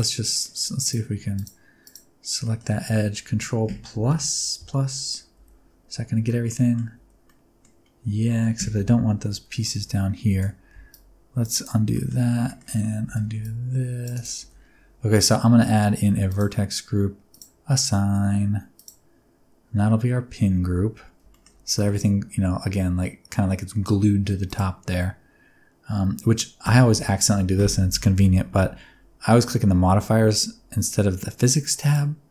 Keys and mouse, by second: 0.3 middle click, 1.9 alt+click, 2.4 middle click, 4.1 ctrl+KP_Add, 5.1 click, 5.1 right click, 5.3 alt+z, 5.4-6.8 drag, 5.4-6.8 right drag, 6.9 alt+z, 7.0-8.6 drag, 7.0-8.6 right drag, 8.6 KP_1, 9.3 alt+z, 9.7 alt+z, 10.3 c, 11.5 click, 11.9 shift+middle click, 12.4 shift+middle click, 13.0 c, 14.1 click, 14.4 alt+z, 16.3 drag, 17.3 click, 18.8 click, 20.7 Tab, 21.3 middle click, 24.4 click.